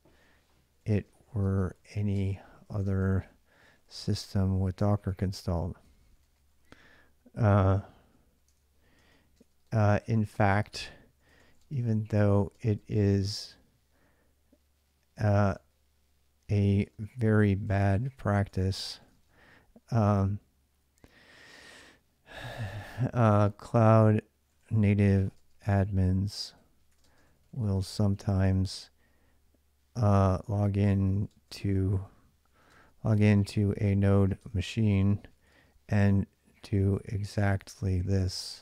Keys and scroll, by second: 0.4-6.5 typing, 8.1-13.1 typing, 15.4 typing, 16.5-19.4 typing, 22.9-38.6 typing.